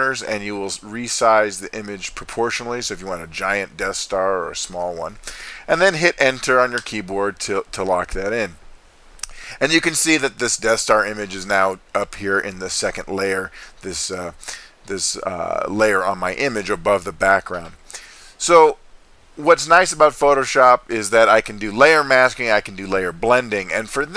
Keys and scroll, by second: 6.8 Return.